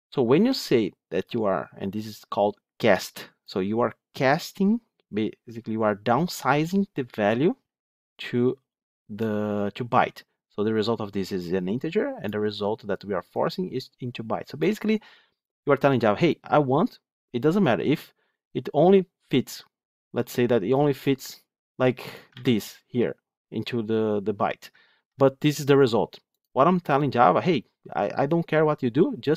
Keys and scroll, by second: 22.2 ctrl+x, 24.8 ctrl+x, 25.8 ctrl+z.